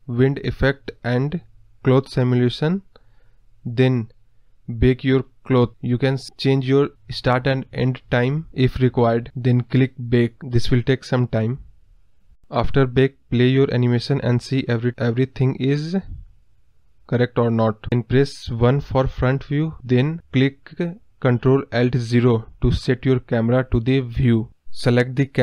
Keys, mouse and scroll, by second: 1.4 click, 2.7 scroll down 1, 2.8-11.3 middle drag, 12.3-12.6 scroll down 1, 12.6 middle click, 13.3 scroll up 2, 13.5 middle click, 14.3 space, 18.7 space, 19.1 space, 19.9 space, 21.0 KP_1, 21.7 ctrl+alt+KP_0, 22.4 ctrl+z, 23.1 click.